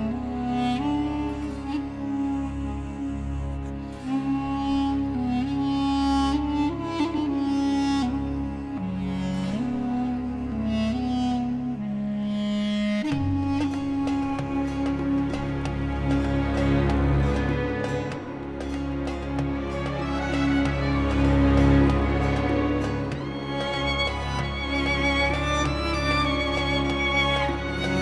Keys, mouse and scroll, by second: 8.9 click, 10.6 space, 10.8 click, 11.1 space, 12.3 ctrl+scroll down 1, 13.1 space, 13.2 click, 13.6 space, 17.6 click.